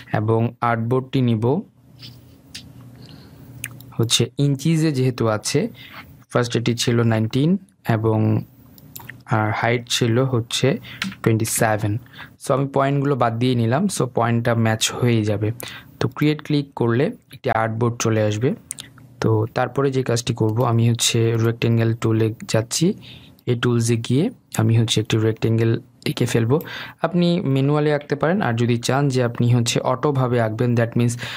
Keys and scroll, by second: 29.1 Delete.